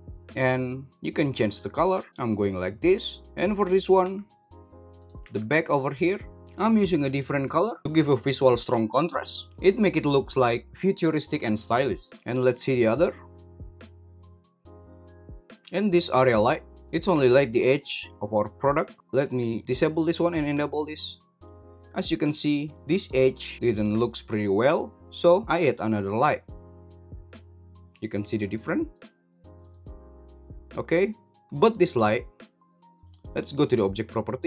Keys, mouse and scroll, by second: 0.5 click, 4.0 g, 4.9 right click, 9.6 g, 13.3 click, 13.4 ctrl+z, 13.4 h, 14.0 ctrl+z, 14.3 click, 14.8 h, 15.1 click, 15.3 h, 15.6 super+g, 17.1 g, 19.7 click, 20.6 click, 25.8 click, 28.9 click, 29.6 click, 31.3 g, 33.8 click.